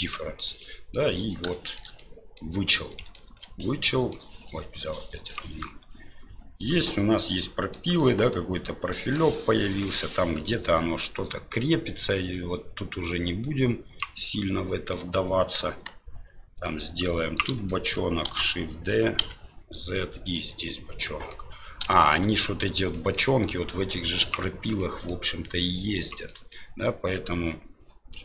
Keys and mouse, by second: 0.6-0.9 middle drag, 1.5 shift+middle drag, 2.0-2.4 middle drag, 2.9 middle drag, 3.3 ctrl+z, 3.6 middle click, 5.3 click, 6.6 right click, 6.9-7.7 middle drag, 8.1 middle drag, 9.1 right click, 9.4 middle drag, 9.7 middle click, 10.4-14.0 drag, 14.3 middle click, 15.6 KP_1, 16.7 click, 17.7 shift+middle click, 18.3 shift+d, 20.7 middle click, 22.0 shift+middle click, 23.0 middle click, 23.6-24.8 drag, 24.8 middle click, 25.8 click, 26.4 middle click.